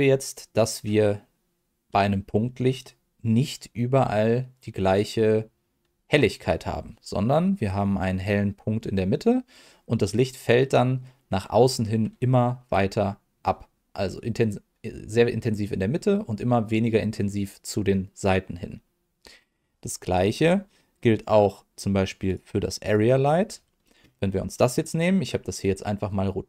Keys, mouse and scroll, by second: 22.2 click, 22.8 click, 24.8 middle click.